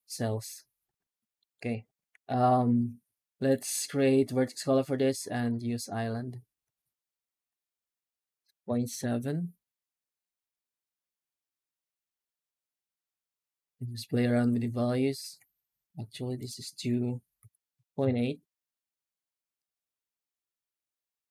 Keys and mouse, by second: 0.7 ctrl+space, 1.2 middle drag, 1.5 right click, 2.0 shift+q, 12.0 F9.